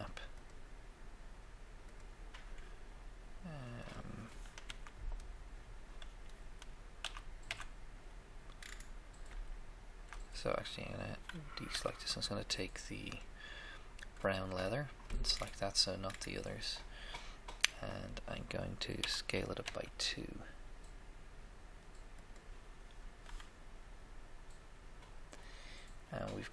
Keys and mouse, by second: 0.5-2.1 drag, 4.7 Tab, 5.0 Tab, 7.2 a, 7.8 a, 11.7 a, 14.1-16.3 drag, 19.1 s, 19.6 2, 21.6 s.